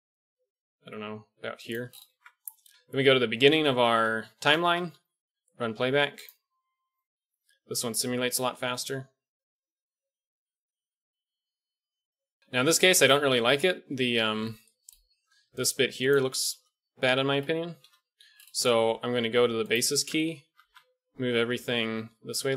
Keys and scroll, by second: 2.0 Tab, 2.7 shift+Left, 4.0 shift+Left, 4.6 alt+a, 12.4 alt+a, 12.4 KP_1, 15.4 d, 16.1 d, 16.2 d, 16.5 ctrl+z, 17.8 KP_1, 19.9 Tab, 20.5 a, 20.6 a, 21.9 g.